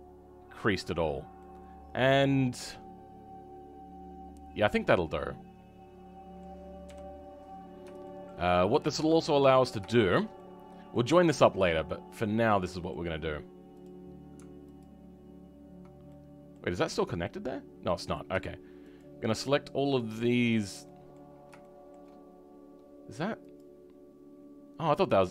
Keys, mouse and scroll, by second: 1.0 scroll down 2, 1.3-5.3 middle drag, 7.5-7.9 scroll up 2, 7.9 shift+middle click, 8.3 scroll down 3, 8.6 middle click, 9.3-9.8 scroll up 3, 9.8 shift+middle click, 12.3-13.7 middle drag, 13.7 click, 16.0 middle click, 17.0 click, 17.8-18.9 middle drag, 18.9 shift+click, 19.9 shift+click, 20.8 middle click, 21.2-21.5 scroll down 4, 21.5 shift+middle click, 22.1-23.5 scroll up 6, 23.5 click, 24.2-25.2 scroll down 5, 25.2 middle click.